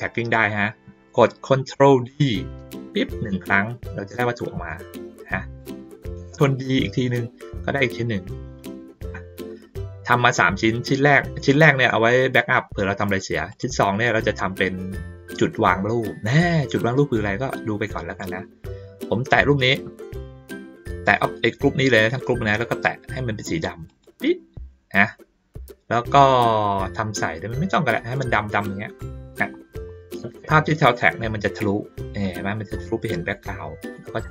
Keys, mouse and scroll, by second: 3.8-5.6 drag, 7.4-9.0 drag, 10.8 click, 11.5 click, 13.5 click, 21.2 click, 23.9 click, 29.2 ctrl+middle click, 29.6 ctrl+middle click, 32.9 ctrl+middle click, 33.9 ctrl+middle click.